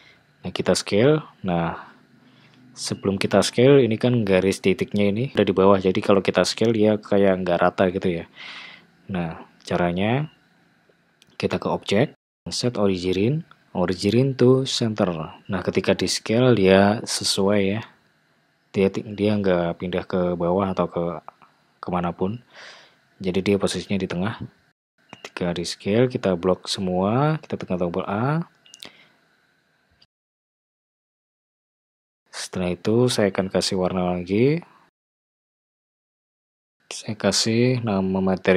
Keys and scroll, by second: 0.7 s, 9.5 super+z, 15.7 s, 25.4 Tab, 27.1 a.